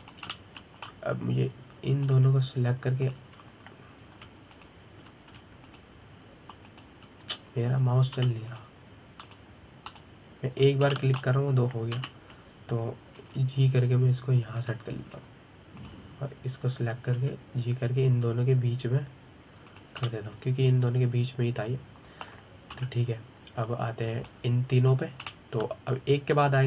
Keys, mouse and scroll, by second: 0.5 g, 2.0-3.7 middle drag, 3.7 click, 4.7 shift+click, 6.2 shift+click, 7.3 shift+click, 8.3 shift+click, 10.2 shift+click, 10.9 shift+click, 11.6 shift+click, 12.6-13.6 middle drag, 13.6 KP_7, 14.9 g, 16.3 click, 17.4 click, 18.8 g, 21.4 click, 21.7-24.4 middle drag, 24.4 KP_7, 25.9 click.